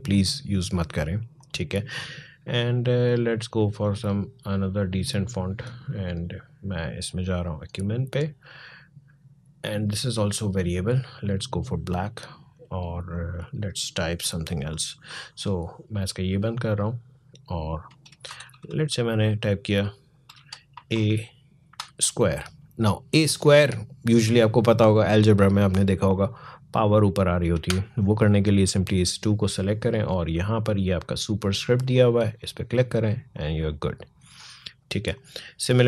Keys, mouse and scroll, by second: 9.5-15.9 drag, 16.5 click, 18.1 shift+h, 20.1 BackSpace, 20.5 a, 21.5 a, 28.3-31.2 drag, 31.5-35.8 drag.